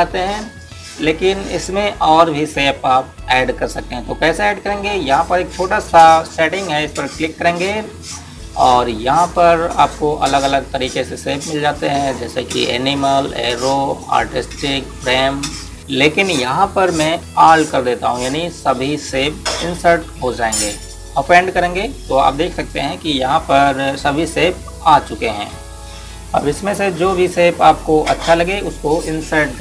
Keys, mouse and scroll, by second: 15.8 click, 28.3 click, 28.5 click.